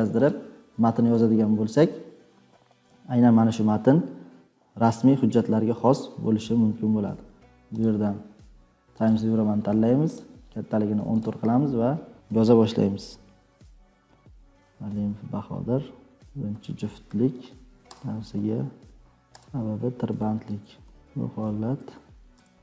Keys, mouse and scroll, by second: 18.9-22.6 typing.